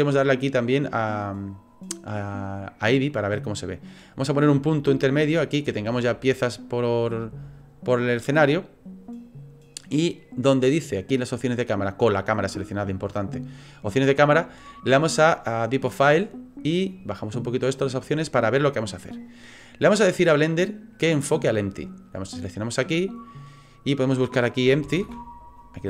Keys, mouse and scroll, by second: 0.4 click, 4.3 click, 16.1 click, 17.1 click, 22.9 click.